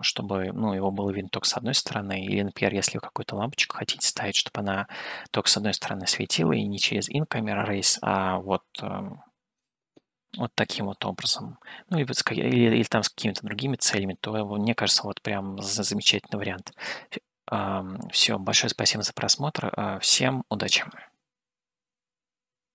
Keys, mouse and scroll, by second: 0.0-6.7 middle drag, 10.2-12.5 middle drag, 10.2-10.6 scroll up 1, 12.5 scroll down 1, 15.0-16.2 scroll down 3, 16.2 middle click.